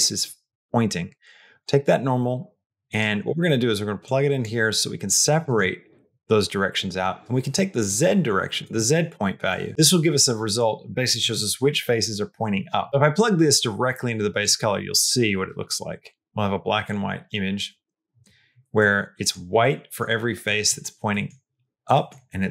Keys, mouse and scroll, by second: 1.5-2.9 drag, 3.9 click, 7.9 click, 8.7 middle click, 9.3 click, 10.4 click, 12.9-14.4 drag, 18.6 middle click, 19.5 middle click, 20.3 middle click, 20.9 middle click, 21.8 middle click.